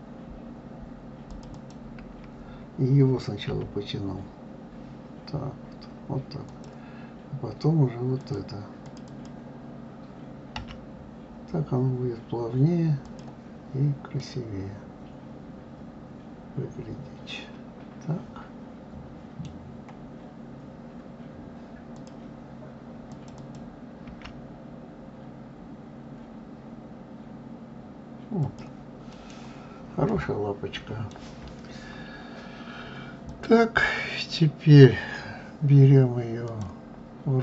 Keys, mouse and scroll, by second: 1.1 click, 1.3 click, 3.2 g, 8.0 click, 8.6 click, 8.8 click, 10.4 g, 13.9-17.0 middle drag, 21.7 click, 22.9 click, 23.2 click, 23.9 g, 28.9 middle click, 29.2-29.9 scroll down 1, 29.9-32.9 middle drag, 33.0 click, 36.2-37.4 drag.